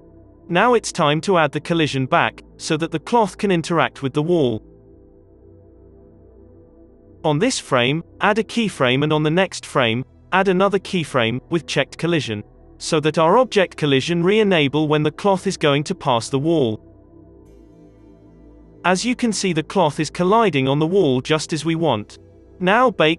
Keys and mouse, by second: 1.0 space, 2.2 space, 2.4 space, 2.4 ctrl+s, 2.4-4.4 drag, 2.4-4.4 right drag, 4.4-6.5 middle drag, 6.5-8.7 drag, 7.9 i, 9.1 i, 10.1 Right, 10.3 Right, 10.5 Right, 10.7-12.7 drag, 11.6 i, 12.7 space, 16.9-20.9 middle drag, 16.9 space, 17.8 space, 18.6 space, 18.8 space, 21.5 space, 22.2 ctrl+s, 22.4 middle click.